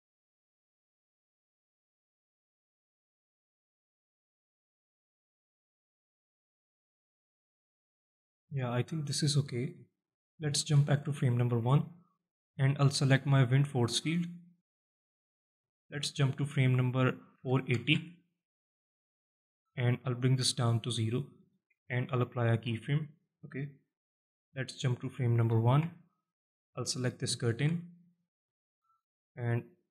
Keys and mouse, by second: 0.1-0.5 alt+shift+middle drag, 0.7-1.0 alt+middle drag, 1.4-1.7 alt+shift+middle drag, 2.2-3.2 alt+shift+middle drag, 3.2 space, 7.7 space, 8.6-9.2 middle drag, 9.6-10.0 shift+middle drag, 11.3 shift+Left, 11.9-12.2 alt+middle drag, 13.1 click, 13.6-14.0 middle drag, 14.3-14.6 alt+shift+middle drag, 15.0 alt+middle click, 15.5 alt+shift+middle drag, 16.4-18.4 drag, 18.8 click, 20.3-23.1 drag, 24.6-26.3 drag, 27.2 shift+middle drag, 27.5 middle drag, 28.0-29.6 alt+shift+middle drag, 29.6 click.